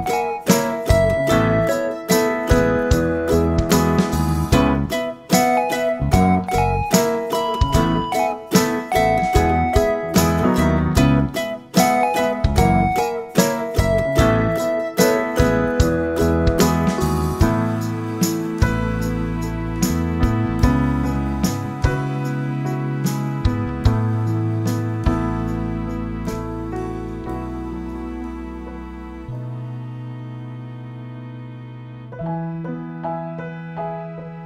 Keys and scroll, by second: 26.4 8, 26.8-33.4 Return, 30.9-32.2 typing.